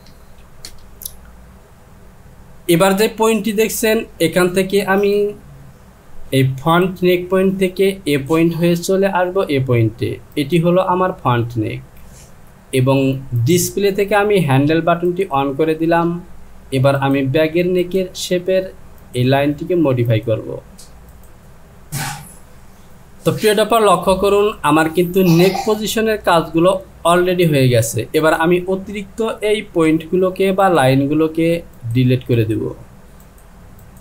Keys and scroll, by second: 0.1 KP_2, 0.7 Return.